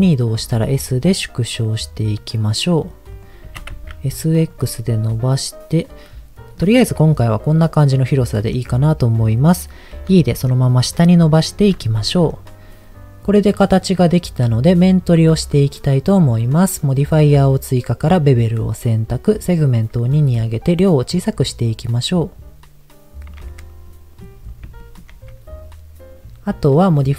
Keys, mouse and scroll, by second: 0.4 s, 3.2 click, 3.4 s, 3.6 x, 4.4 click, 4.6-6.7 middle drag, 6.8-8.6 middle drag, 9.3 middle click, 10.0 e, 11.4 click, 11.8 Tab, 12.3-13.9 middle drag, 19.4 click, 20.4-23.2 shift+drag, 24.0 middle click, 24.2-24.8 scroll up 4, 24.8 shift+middle click, 26.2 scroll down 2.